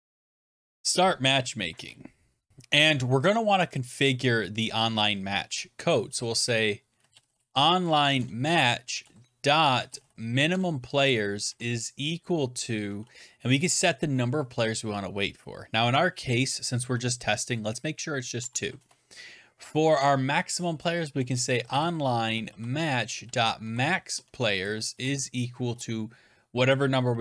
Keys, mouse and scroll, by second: 0.0-1.6 typing, 2.5 Return, 2.5 click, 2.8 click, 2.8 click, 2.8 click, 6.0-11.9 typing, 10.4 Tab, 18.3 typing, 18.6 Return, 20.6-25.3 typing, 24.0 Tab.